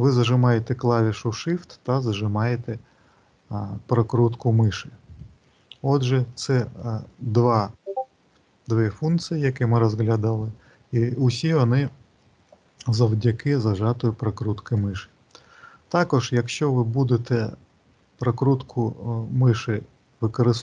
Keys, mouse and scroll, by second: 0.8 shift+middle click, 2.9 shift+middle click, 6.9 middle click, 8.9 middle click, 10.3 middle click, 12.1 middle click, 16.4-17.1 scroll down 5, 17.1-18.4 scroll up 6, 18.4-19.1 scroll down 2, 19.1-20.1 scroll up 4, 20.1-20.6 scroll down 2.